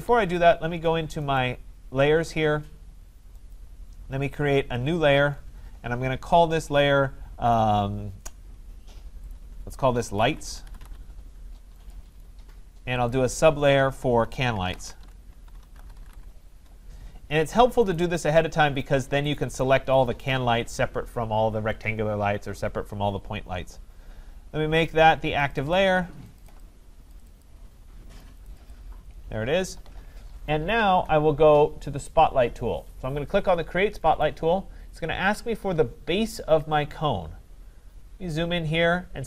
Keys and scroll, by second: 16.5 Return.